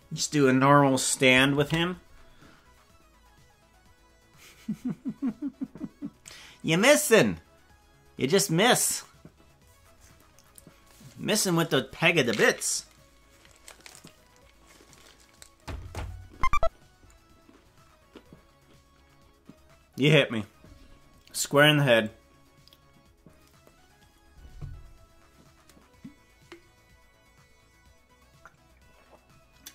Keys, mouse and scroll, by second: 1.6 ctrl+s.